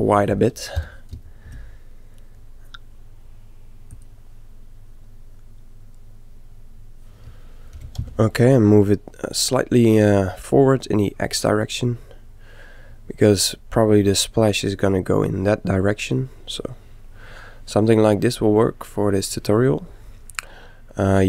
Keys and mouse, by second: 0.7 ., 1.2 s, 7.0 s, 7.9 g, 11.1-12.9 middle drag, 16.3-18.1 middle drag, 20.7-21.2 middle drag.